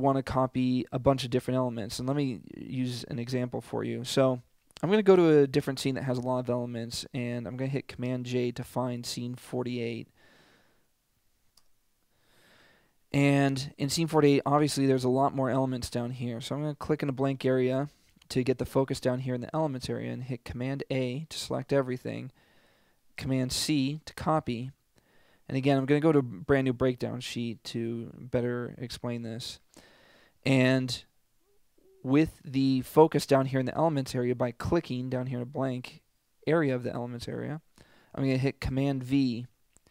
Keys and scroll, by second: 7.8 super+j, 11.7 Return, 20.8 super+a, 23.6 super+c, 39.4 super+v.